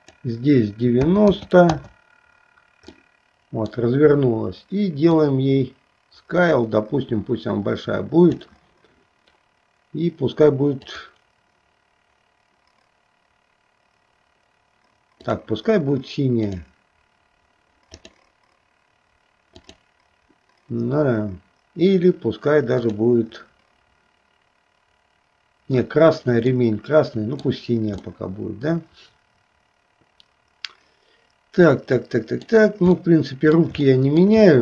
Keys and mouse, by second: 0.0-1.9 drag, 3.1 middle click, 5.1-8.6 drag, 10.8 click, 15.4 click, 16.5 click, 19.6 click, 22.9 click, 26.6 middle click, 28.2-32.7 middle drag, 33.1 middle click, 34.0 shift+middle click.